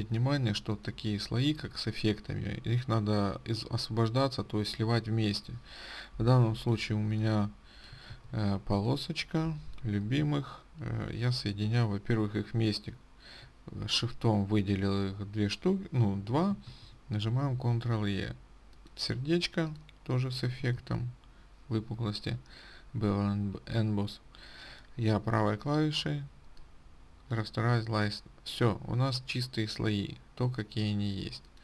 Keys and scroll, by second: 8.5 ctrl+z, 10.7 ctrl+z, 17.2 ctrl+e, 21.3 ctrl+z, 21.3 ctrl+e.